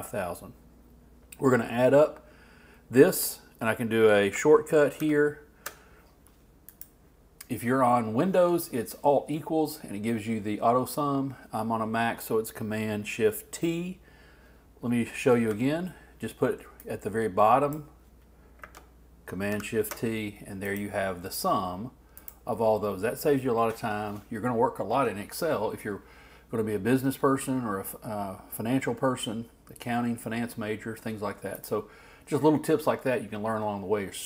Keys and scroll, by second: 5.0 shift+super+t, 19.5 shift+super+t.